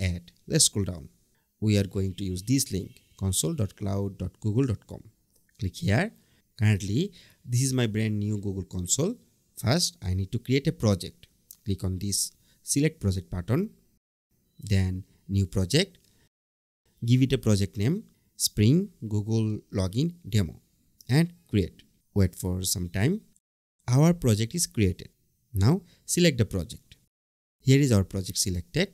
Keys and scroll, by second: 18.2 BackSpace.